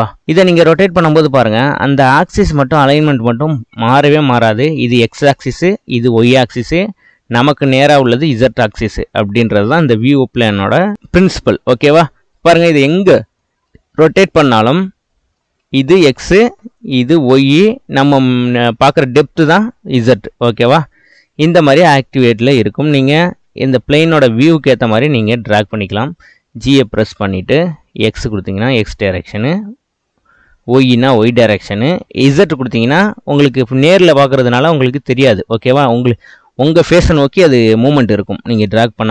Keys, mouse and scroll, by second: 0.7-3.8 middle drag, 12.3-16.7 middle drag, 23.6-26.8 middle drag, 27.3 g.